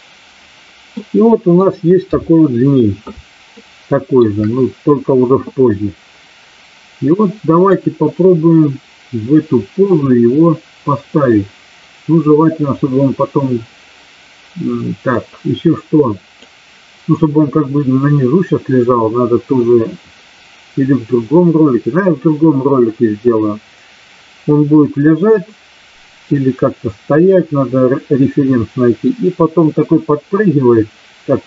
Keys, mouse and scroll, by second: 0.9-1.7 middle drag, 2.0 KP_3, 3.5-4.1 shift+middle drag, 15.0-16.4 drag.